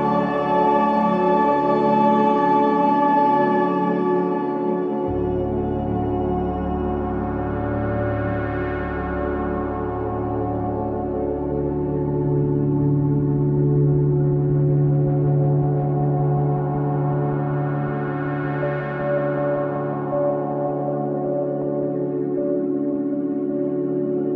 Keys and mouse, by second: 1.0 ctrl+alt+click, 1.5 alt+shift+click, 2.6 Tab, 3.6 ctrl+a, 4.4 Caps_Lock, 4.7-5.8 typing, 6.8 Tab, 8.0 click, 9.7 click, 9.7 typing, 10.3 click, 10.8 click, 11.8 click, 13.8 g, 15.6 click, 17.2 alt+click, 18.0 ctrl+alt+click, 19.0-20.0 alt+drag, 23.4 click, 24.1 click.